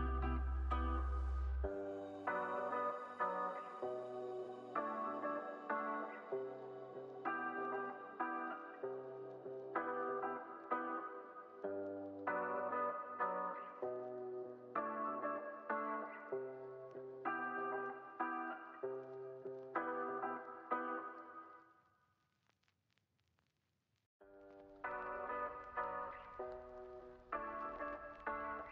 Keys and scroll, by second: 1.5 super+s, 2.4 alt+z, 2.9 alt+x, 6.4 super+c, 6.8 super+v, 8.4 super+=, 8.8 space, 10.5 alt+x, 15.5-16.5 typing, 19.4 space, 20.9 alt+z, 22.6 alt+x, 25.6 shift+r, 26.7 x.